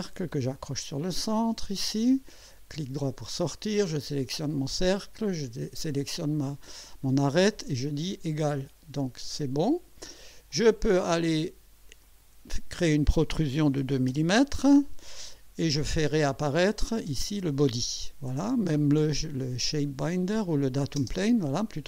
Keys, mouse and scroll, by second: 0.5 click, 1.4 click, 2.9 right click, 3.9 click, 5.4 click, 8.5 click, 9.7 click, 10.5-11.1 drag, 12.0 click, 13.7 2, 14.1 Return, 15.8-16.1 scroll up 1, 16.7 click, 17.1 space, 19.3 scroll down 2, 20.5 click, 21.0 space, 21.7-21.8 drag.